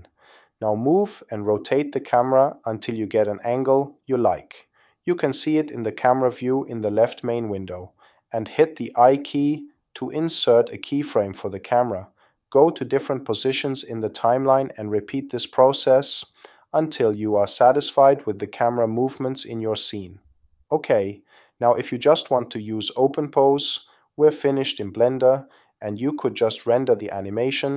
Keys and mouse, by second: 0.5 middle click, 1.3 click, 2.8 click, 3.7 click, 4.4 middle click, 6.3 click, 7.4 n, 8.2 i, 10.3 i, 12.2 click, 12.5 click, 13.1 click, 13.6 n, 13.9 i, 13.9 n, 14.1 click, 14.5 click, 14.9 click, 15.1 click, 15.5 click, 15.9 n, 15.9 i, 16.1 drag, 16.1 i, 16.4 middle click, 16.6 click, 16.7 middle click, 17.0 click, 17.4-20.3 typing, 17.6 click, 18.6 click, 19.3 click, 19.4 middle click, 19.6 click, 19.9 middle click, 20.5 click, 21.9 click, 24.1 click, 26.5-27.7 drag.